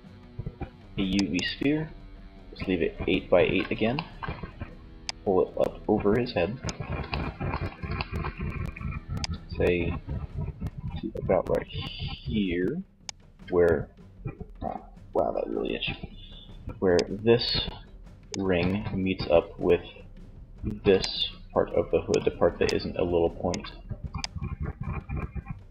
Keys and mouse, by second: 4.1 click, 16.1-17.7 drag, 16.1 d, 17.7 z, 20.1-21.2 drag, 20.1 d, 21.7 d, 22.7 d, 23.4 d, 25.5 z.